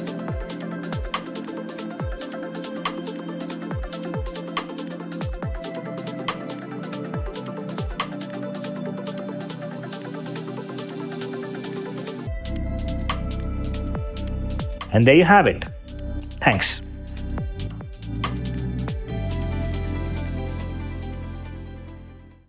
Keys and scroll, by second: 10.6 0, 10.8 Return.